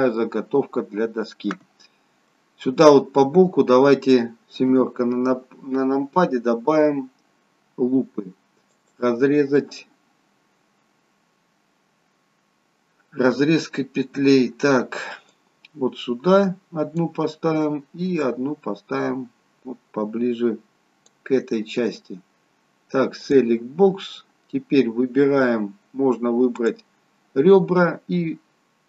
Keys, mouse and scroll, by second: 0.1 middle click, 4.7 KP_7, 8.7 click, 15.3 click, 23.2 click, 26.8 click.